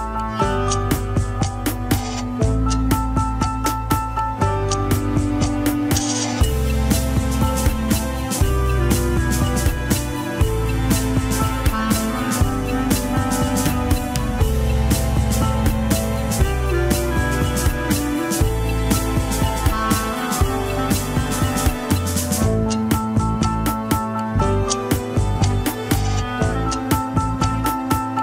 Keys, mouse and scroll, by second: 0.1 Tab, 0.2 a, 0.8 click, 1.4 Tab, 2.4 ctrl+s, 3.0 click, 3.8 h, 4.1 click, 4.3 KP_3, 4.5 scroll up 2, 4.9 shift+middle click, 5.1 alt+z, 5.6 scroll down 1, 5.9 shift+middle click, 6.1 alt+z, 6.1 scroll up 1, 6.4 middle click, 7.2 shift+click, 8.1 click, 8.7 click, 9.6 click, 11.0-11.4 scroll down 3, 11.4 shift+click, 12.5 ctrl+p, 14.5 shift+h, 14.9 click, 15.9 drag, 16.9 middle drag, 17.2-17.7 scroll up 3, 17.4 KP_1, 18.2 ctrl+Tab, 18.9 shift+click, 19.8-20.5 shift+middle drag, 20.5-21.4 shift+drag, 24.0 click, 24.7 scroll down 2, 25.7 click, 27.6-28.2 right drag.